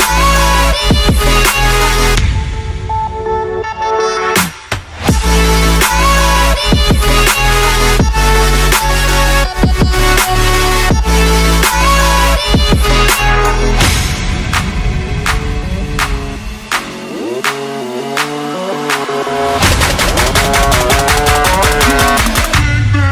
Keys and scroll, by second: 6.6 super+j.